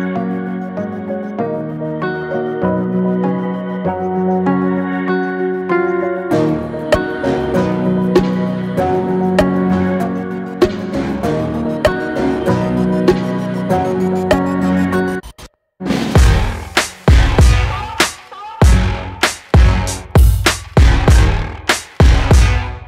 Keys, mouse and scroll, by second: 0.4-1.7 middle drag, 1.7-2.5 scroll up 1, 2.5 scroll up 1, 2.8-4.1 middle drag, 4.1 click, 4.5 click, 5.4-6.0 middle drag, 6.0 scroll up 2, 6.6-6.9 middle drag, 7.3-9.0 middle drag, 10.5-14.7 middle drag, 14.7-15.3 scroll up 1, 15.3-15.7 shift+middle drag, 15.7-16.4 scroll up 2, 16.4-18.7 shift+middle drag, 18.7-22.4 right drag, 22.4 click.